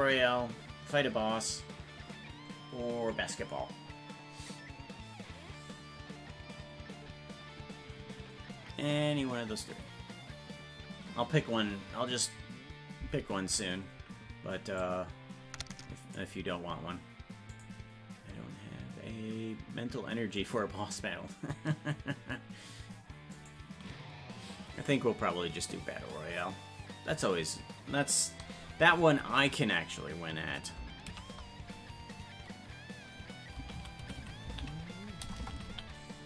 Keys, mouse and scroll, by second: 14.9-16.2 drag.